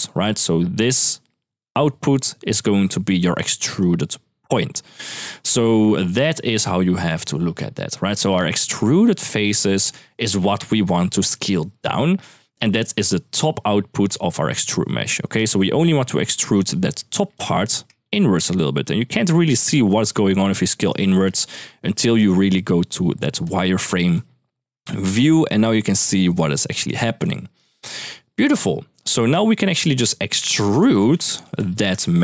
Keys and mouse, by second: 0.0-6.9 typing, 3.6 click, 12.2-14.6 d, 14.9 click, 15.4 middle click, 16.0-17.1 drag, 17.8-20.7 shift+drag, 23.2 click, 23.9-24.7 middle drag, 25.3-26.6 shift+drag, 27.0-27.4 middle drag, 28.8 middle click, 29.4 click, 30.7 shift+a.